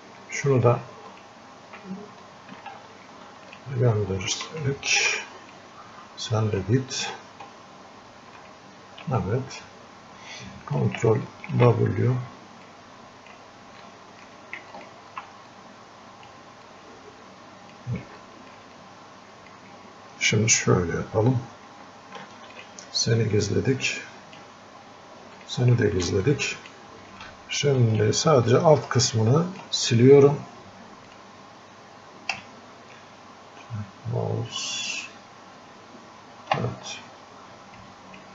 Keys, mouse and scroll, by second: 2.6 ctrl+z, 3.5 ctrl+alt+shift+click, 5.0 ctrl+z, 5.6-8.4 drag, 9.2-11.5 drag, 11.5 ctrl+w, 12.7 click, 13.8-15.6 alt+drag, 15.6 click, 16.7-18.3 drag, 18.3 alt+click, 18.8-26.2 drag, 26.6 click, 27.6 ctrl+alt+shift+click, 28.8-31.2 drag, 31.2 click, 32.4 space, 37.8 click.